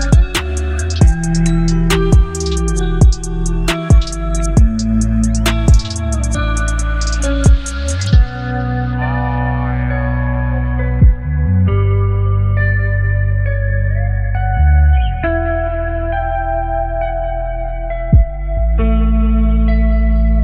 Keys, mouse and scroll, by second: 4.9 ctrl+0.